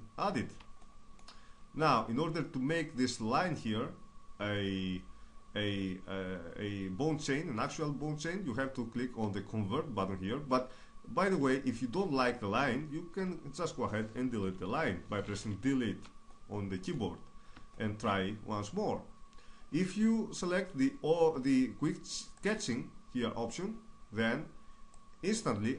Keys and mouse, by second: 0.4 click, 1.4-14.5 middle drag, 14.5 Delete, 15.8-22.4 middle drag, 22.4-25.7 drag.